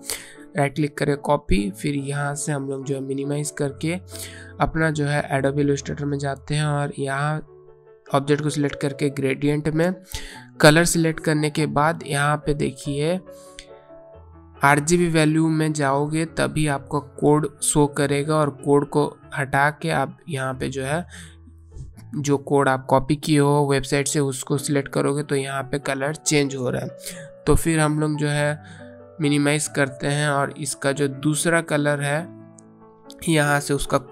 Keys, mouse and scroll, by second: 0.2 click, 3.0 click, 8.0 click, 12.9 click, 18.4 BackSpace, 20.4 ctrl+v, 23.7 click, 30.0 click.